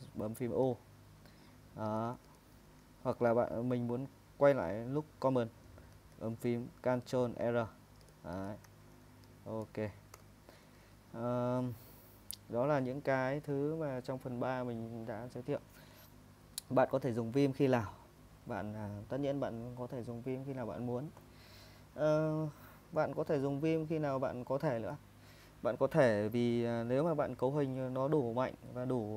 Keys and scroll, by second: 0.7-3.3 typing, 5.9 ctrl+r, 7.8-10.1 typing, 10.7 super+Tab.